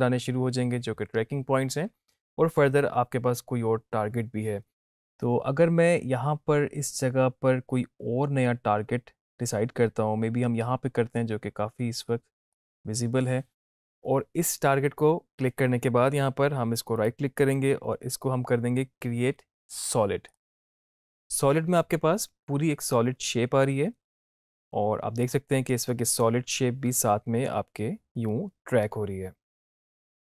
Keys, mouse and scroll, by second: 12.6 click, 17.0 click, 17.2 right click, 20.4 click, 25.3-30.3 drag.